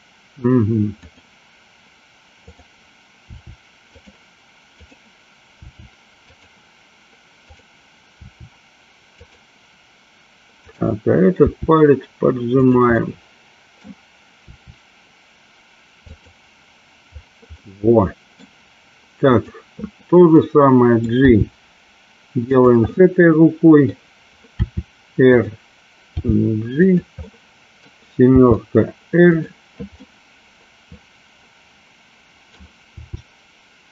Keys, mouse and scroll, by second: 2.4 click, 3.3 r, 4.8 click, 5.7 r, 6.4 click, 7.6 click, 8.2 r, 9.2 click, 10.8 click, 11.4 r, 13.0 middle click, 14.6 r, 16.2 click, 17.7 middle click, 19.6 click, 20.4 middle click, 21.3 g, 22.5 click, 22.9 scroll up 1, 23.1 middle click, 24.7 r, 26.2 g, 26.8 click, 27.3-27.9 middle drag, 28.5 r, 29.5 click, 30.1-32.7 middle drag, 33.0 r.